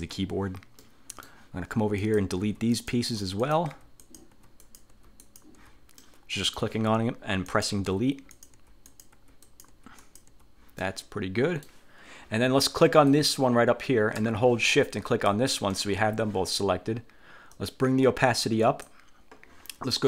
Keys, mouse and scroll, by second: 0.2 Delete, 1.0 middle click, 2.2 click, 2.6 Delete, 2.8 click, 3.2 Delete, 3.6 click, 3.9 Delete, 4.2 click, 4.8 click, 5.4 click, 6.1 middle click, 7.6 click, 8.0 Delete, 8.4 click, 8.8 Delete, 9.0 click, 9.6 click, 10.1 click, 10.9 middle click, 10.9-11.3 scroll up 1, 11.3 click, 13.2 click, 15.2 shift+click, 17.6-19.1 drag.